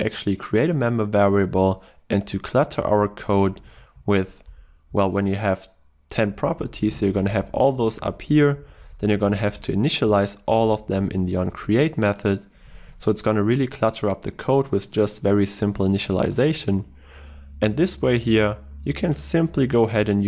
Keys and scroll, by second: 1.5 ctrl+w, 18.3 ctrl+w, 20.1 ctrl+w.